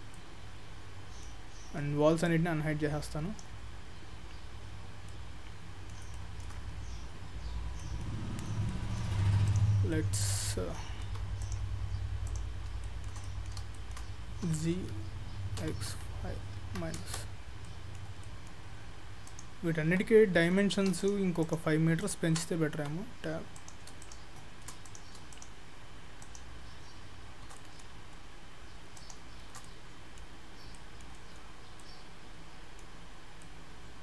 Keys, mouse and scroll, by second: 0.2 middle click, 2.3 click, 3.8-4.4 scroll up 3, 4.4 scroll down 1, 4.5 scroll down 1, 4.7-5.1 scroll up 2, 5.1 middle click, 6.2 shift+middle click, 6.7-7.4 scroll down 2, 7.4 scroll up 1, 7.8 middle click, 8.3-8.8 scroll down 7, 8.8 middle click, 9.5 click, 10.0 middle click, 10.5 middle click, 11.1 Tab, 11.4 click, 12.3 click, 12.6 scroll up 2, 12.9 shift+middle click, 13.2 shift+middle click, 13.3 middle click, 13.8 shift+middle click, 14.5 g, 17.7 middle click, 18.3 middle click, 19.3 click, 19.8 Tab, 20.4 Tab, 21.0 shift+click, 22.4 shift+click, 22.8 Tab, 23.6 click, 24.0 shift+click, 24.9 click, 25.4 shift+click, 27.1 shift+click, 27.6 middle click, 29.0 shift+click, 29.7 middle click, 30.8 middle click, 31.5-31.8 scroll up 3, 31.8 middle click, 33.0-33.8 scroll down 3, 33.5 middle click.